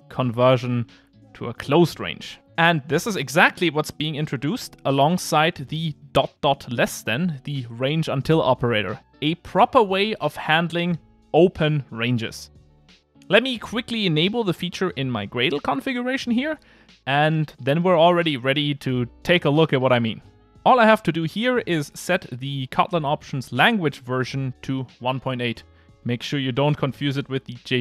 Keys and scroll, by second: 25.6 super+/.